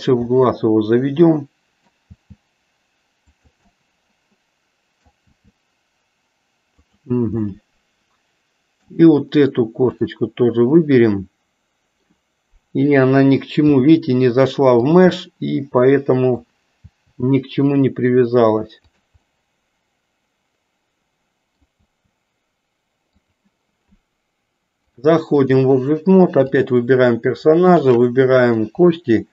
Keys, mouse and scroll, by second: 0.3-1.9 middle drag, 2.3 g, 3.7-5.0 middle drag, 5.3 g, 7.5 scroll up 1, 7.8-9.0 middle drag, 9.8 click, 11.1 middle click, 13.7 g, 15.2-16.5 middle drag, 16.8 g, 19.4 middle click, 20.8 scroll up 1, 21.0 middle click, 21.9 g, 24.9 click, 26.4 click, 27.8 shift+click.